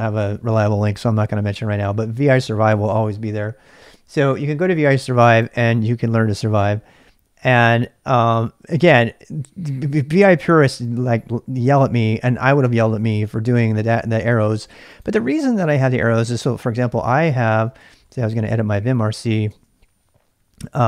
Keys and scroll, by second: 16.5-20.8 typing.